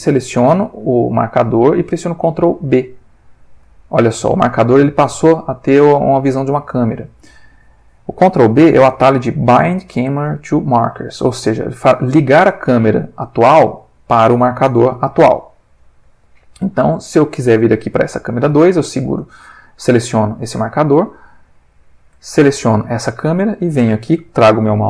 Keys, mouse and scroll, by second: 2.8 ctrl+b, 7.6 click, 17.4 click, 18.3 click, 22.3 shift+click.